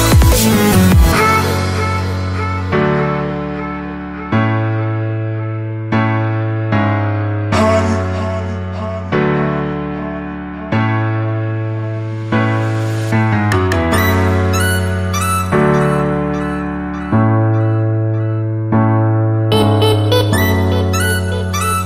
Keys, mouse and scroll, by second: 0.6 c, 1.0 click, 2.2 v, 3.1 click, 6.7 click, 10.7 click, 17.0 s, 18.4 click.